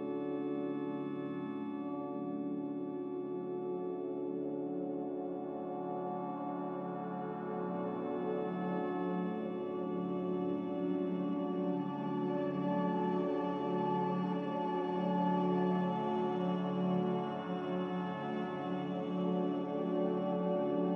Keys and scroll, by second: 3.3 ctrl+z, 3.8 ctrl+z, 9.1 a.